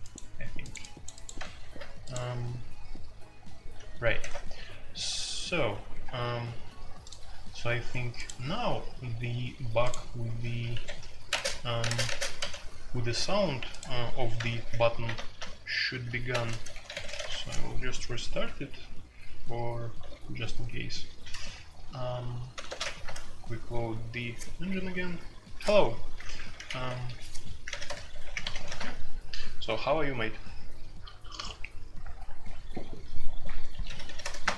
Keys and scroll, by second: 4.2 shift+c, 10.7 Escape, 10.8 F2, 11.3-12.3 typing, 11.4 Tab, 11.9 Tab, 14.5 alt+p, 15.1 BackSpace, 15.3 BackSpace, 15.6 BackSpace, 16.3 ctrl+shift+BackSpace, 16.7-17.2 typing, 17.3 Return, 20.0 typing, 21.1 typing, 22.5-23.0 typing, 26.5-28.6 typing, 28.7 Return, 34.0-34.5 typing, 34.4 Return.